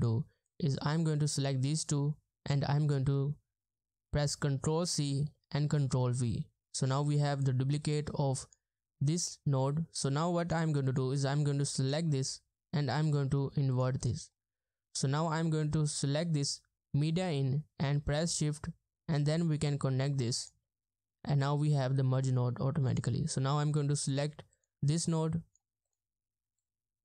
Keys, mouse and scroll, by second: 5.0 ctrl+c, 5.0-6.2 typing, 9.3 middle click, 24.5 double click.